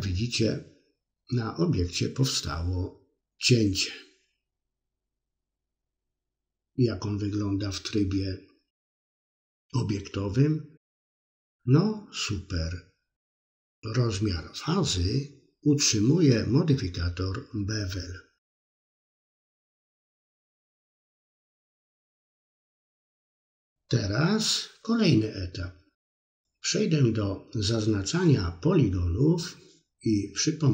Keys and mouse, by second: 5.4 Tab, 7.4-13.3 middle drag, 14.9 Tab, 16.4-19.4 middle drag, 21.6 middle click, 23.8 c, 28.0 click, 29.4 c.